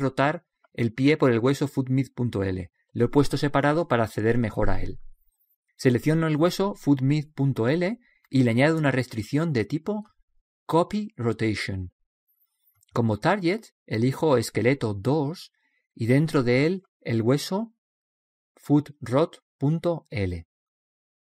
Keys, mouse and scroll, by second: 4.4-6.4 right drag, 8.6-10.4 right drag, 10.5-17.0 drag, 17.5 click, 19.5 o.